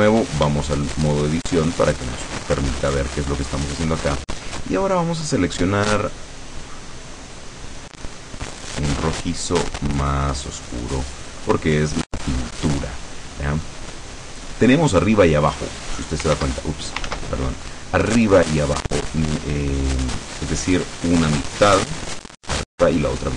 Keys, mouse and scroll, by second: 0.8-2.4 shift+middle drag, 6.1-9.0 drag, 9.6-11.1 drag, 14.3-15.8 drag, 16.4 ctrl+z, 17.2 ctrl+z.